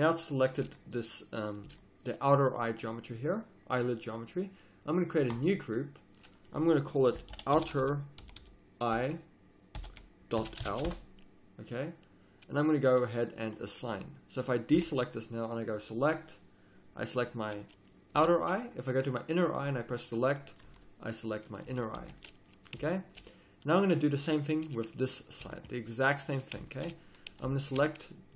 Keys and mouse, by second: 0.6 z, 1.6 z, 5.3-17.7 drag, 14.7 a, 18.2 a, 20.4-21.4 drag, 20.6 z, 21.6 z, 22.0 a, 24.9 click, 25.5 z, 27.5 middle click.